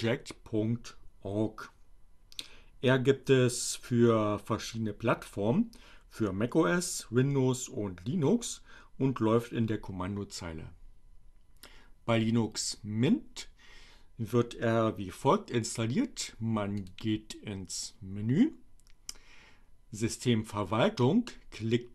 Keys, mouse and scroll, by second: 16.8 click.